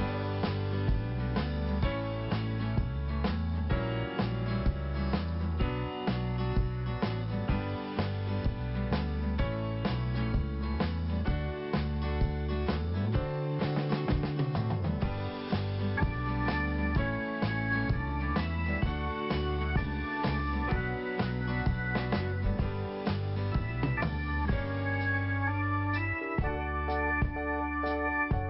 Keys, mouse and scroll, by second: 0.7 scroll up 1, 1.9 click, 5.1 click, 6.1 click, 8.6 click, 9.3 scroll up 1, 10.1 click, 18.2 click, 19.1 scroll down 1, 20.5 scroll up 1, 23.3 click, 25.7-26.1 scroll down 1, 27.4 click.